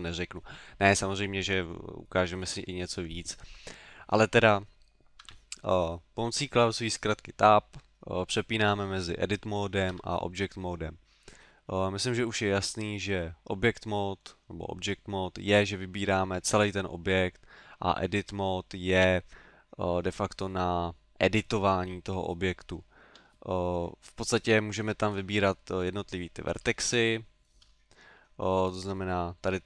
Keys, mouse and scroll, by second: 5.2 Tab, 8.6 Tab, 9.9 Tab, 11.6 middle click, 12.4 middle click, 23.1 Tab, 24.6 middle click, 25.5-26.1 scroll up 4, 27.0 shift+middle click, 28.7 right click.